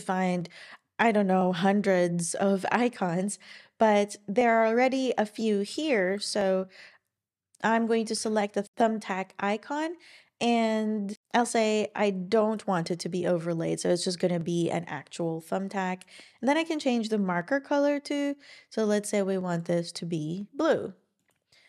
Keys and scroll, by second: 5.6-6.5 typing, 7.7 Down, 8.2 Return.